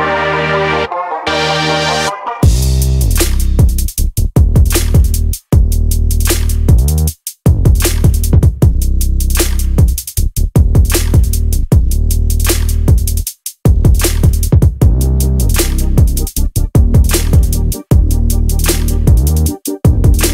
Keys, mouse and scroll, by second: 1.0-3.6 drag, 3.7-4.1 scroll up 2, 4.3-4.7 scroll down 1, 5.1-8.5 drag, 8.9 click, 9.3-9.7 scroll up 1, 10.1 click, 10.8 click, 11.7-12.5 drag, 12.8-13.4 scroll up 2, 14.4 click, 15.0 click, 15.9 click, 16.1-16.6 scroll up 2, 17.5-17.9 scroll up 2, 18.5 click, 19.6 click, 20.2-20.3 drag.